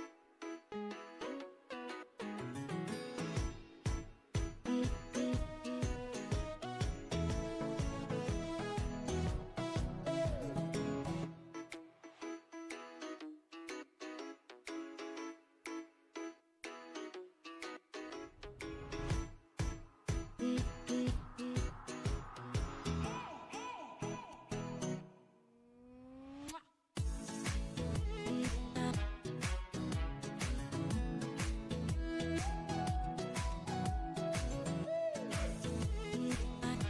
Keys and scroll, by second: 3.8 ctrl+i.